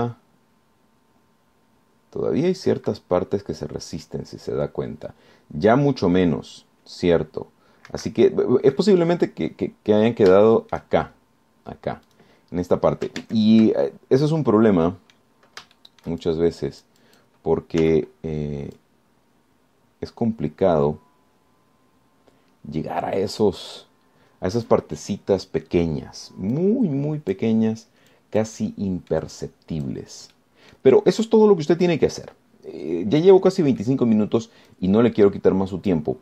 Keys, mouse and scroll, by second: 0.6 r, 1.0 z, 9.1 Escape, 10.0 click, 11.6 shift+click, 13.3 click, 14.4 ctrl+Tab, 15.5 click, 17.0-18.6 shift+drag, 19.0 z, 20.0-26.1 drag, 27.0 scroll down 1, 27.8 click, 29.4-30.6 drag, 31.6 click, 33.4-33.8 scroll up 2, 34.6 scroll down 2, 35.0 click, 35.9-36.2 drag.